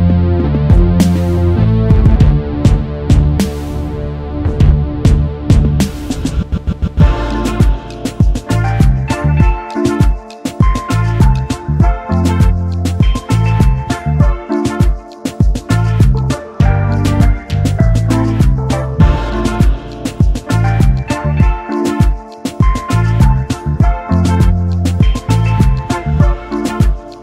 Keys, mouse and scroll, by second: 1.2 shift+click, 2.1 typing, 3.2-3.6 alt+scroll up 1, 4.8 shift+click, 5.8 shift+click, 7.9 double click, 16.7 alt+scroll down 1, 18.5 alt+scroll up 1, 22.5 alt+scroll down 1, 24.9 alt+scroll up 1, 26.0 shift+click.